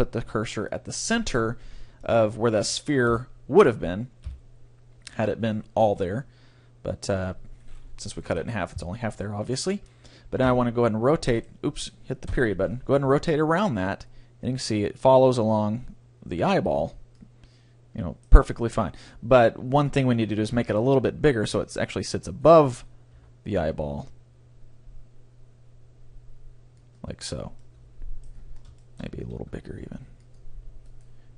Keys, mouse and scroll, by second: 2.0 middle click, 3.1 KP_1, 3.2 middle click, 4.2 KP_3, 8.4 ctrl+l, 10.4 r, 12.4 ., 13.1 r, 16.9 click, 17.2 right click, 18.2 click, 18.2 middle click, 18.2 right click, 18.6 click, 18.7-20.4 middle drag, 20.6 s, 22.5 right click, 23.2 s, 23.8 right click, 27.0-28.1 drag, 27.8 right click, 28.0 right click, 29.4 s, 30.4 click.